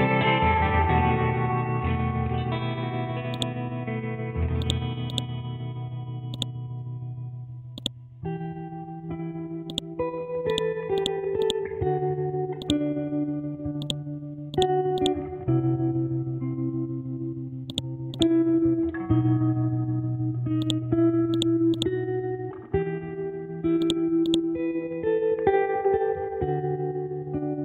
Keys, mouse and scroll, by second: 3.3 click, 4.6 right click, 5.1 click, 9.7 right click, 10.5 click, 11.4 right click, 12.6 click, 17.7 shift+click, 18.1 right click, 20.8 click, 23.0 ctrl+z, 23.8 click.